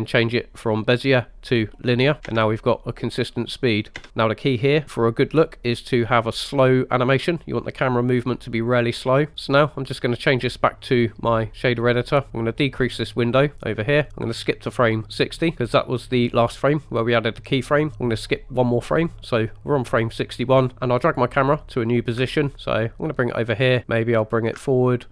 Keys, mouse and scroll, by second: 1.6-2.8 typing, 10.2-11.7 drag, 13.0 click, 13.5 click, 14.7 click, 19.0 click, 20.7 ctrl+click, 22.4-23.8 ctrl+drag, 24.4 ctrl+click.